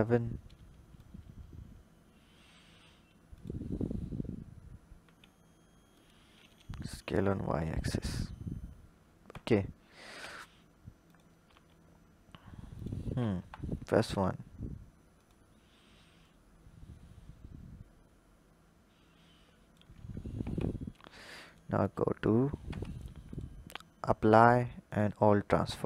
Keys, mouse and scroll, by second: 0.8-3.2 drag, 4.9 s, 6.2 s, 10.0 s, 11.3 s, 13.2 KP_1, 14.1-15.0 scroll up 1, 15.0 click, 16.0 drag, 19.8-20.2 scroll down 4, 20.2 Tab, 21.3 click, 22.6 Tab, 23.1-25.5 drag, 25.5 Tab.